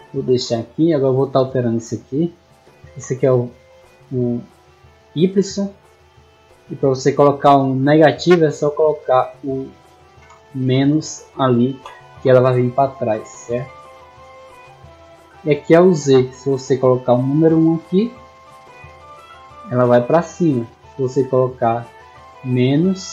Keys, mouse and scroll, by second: 0.6 middle click, 1.5 click, 8.2 click, 9.1 click, 16.2 click, 18.3-19.0 middle drag, 20.2-20.6 middle drag, 22.5 click.